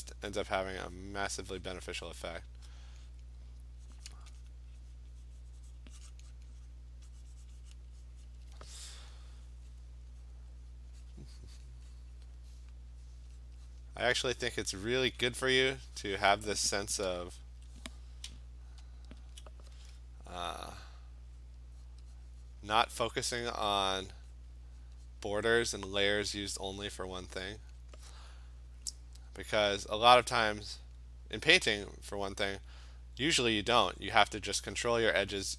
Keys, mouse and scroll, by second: 0.8 click, 1.0 click, 1.5 click, 1.7 click, 2.2 click, 2.5 click, 4.2 click, 4.5 click, 5.0 click, 5.3 click, 5.8 click, 6.1 click, 6.4 click, 6.6 click, 6.7 click, 7.2 click, 7.3 click, 7.5 click, 7.7 click, 7.8 click, 8.3 click, 9.5 click, 9.8 click, 10.3 click, 11.7 click, 12.0 click, 12.4 click, 12.7 click, 13.1 click, 13.5 click, 13.8 click, 14.2 click, 14.7 click, 15.3 click, 15.7 click, 16.1 click, 19.0-24.5 alt+click, 19.4 alt+click, 20.6 click, 20.9 click, 21.5 click, 21.9 click, 22.2 click, 22.7 click, 23.5 click, 23.7 click, 24.1 click, 24.4 click, 24.8 click, 25.1 click, 25.5 click, 25.7 click, 26.1 click, 26.3 click, 26.6 click, 27.8 click, 28.9 click, 30.0 click, 30.8 click, 31.9 click, 32.3 click, 32.6 click, 33.0 click, 33.6 click, 34.1 click, 34.9 click, 35.4 click.